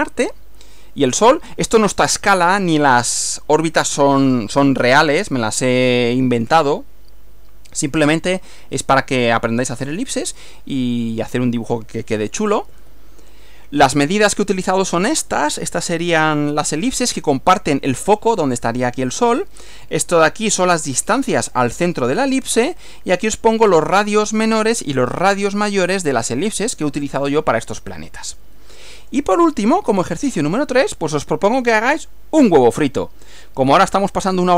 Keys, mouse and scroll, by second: 12.7 Right, 29.0 click, 29.9 Right.